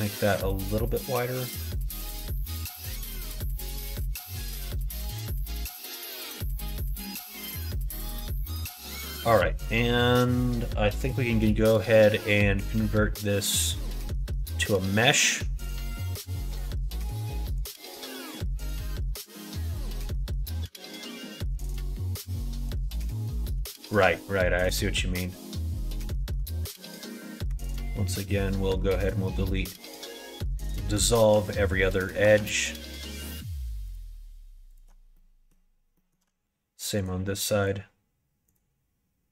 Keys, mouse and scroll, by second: 2.6 click, 2.8 middle click, 3.3 Tab, 3.6 click, 3.9 middle click, 4.5 middle click, 5.0 middle click, 5.5 middle click, 6.7 middle click, 7.8 click, 8.2 middle click, 8.8 middle click, 9.6 middle click, 11.3 middle click, 11.7 middle click, 12.5-17.6 drag, 22.5 middle click, 22.9 middle click, 23.3 shift+middle click, 24.2 middle click, 24.9 middle click, 25.3 middle click, 26.0 click, 26.3 Tab, 27.4 2, 28.5 click, 28.8 middle click, 29.6 alt+click, 29.9 middle click, 30.9 alt+shift+click, 32.8 alt+shift+click, 34.7 alt+shift+click, 35.1 middle click, 35.9 middle click, 38.4 alt+shift+click.